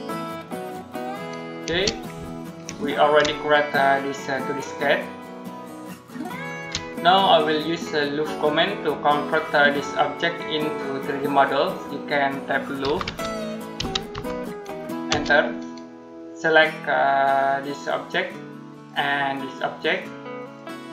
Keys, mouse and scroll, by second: 1.5 space, 3.2 shift+middle click, 6.9 middle click, 11.3-11.7 scroll down 1, 11.7 middle click, 12.4-14.9 typing, 18.6 space.